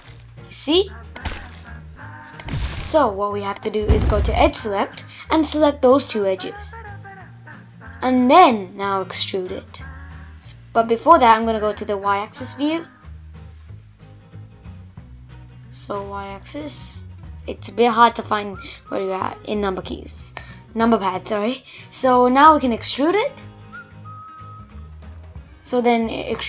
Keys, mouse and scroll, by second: 0.5 2, 1.7-3.2 drag, 4.6 shift+click, 9.3 KP_1, 11.0 KP_3, 13.0-16.0 middle drag, 16.2 click, 17.7-18.6 scroll up 2, 18.6-21.0 scroll up 2, 21.3 e.